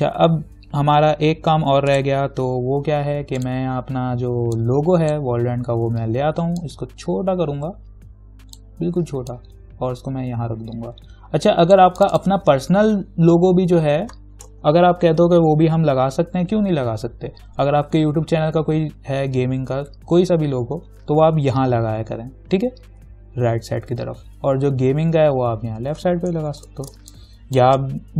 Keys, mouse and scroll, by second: 1.1-1.7 scroll up 1, 2.1-6.8 drag, 6.8-12.2 alt+drag, 14.9 ctrl+=, 26.7 ctrl+=, 27.1 space, 27.3 click, 27.6 space.